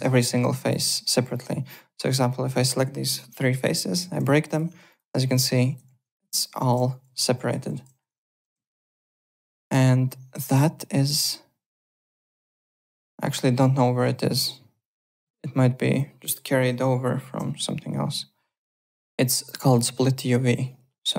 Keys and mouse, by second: 0.2 alt+middle click, 0.5 Tab, 0.7 click, 0.7 Tab, 1.3 click, 4.0 ctrl+b, 4.4 click, 4.7 3, 4.9 click, 5.9 ctrl+z, 6.1 click, 6.8 ctrl+z, 8.5 ctrl+z, 9.4 click, 12.1 click, 14.8 click, 17.3 Home.